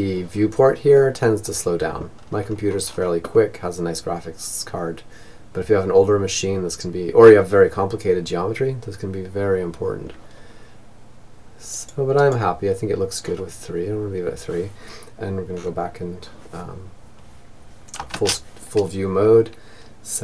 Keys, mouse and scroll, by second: 11.6 click, 12.5-15.9 middle drag, 16.5 shift+space, 18.8-20.2 drag.